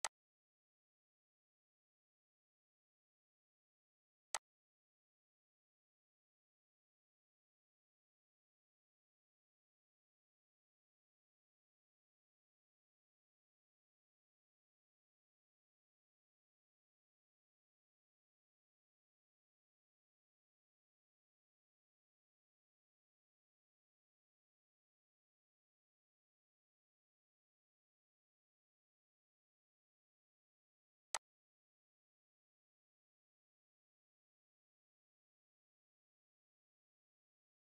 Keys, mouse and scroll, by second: 0.1-11.3 shift+drag, 20.6 ctrl+c, 31.1-36.8 drag.